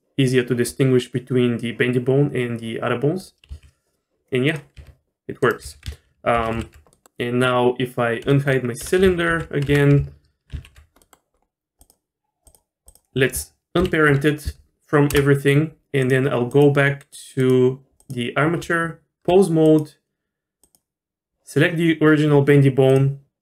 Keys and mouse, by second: 3.2 click, 3.5 g, 4.8 r, 5.6 a, 6.4 alt+g, 6.5 alt+r, 6.9 middle click, 9.3 alt+h, 9.7 Tab, 10.5 alt+h, 11.0 click, 12.5 click, 13.8 alt+p, 18.6 Tab, 19.7 click, 20.6 click, 22.9 click.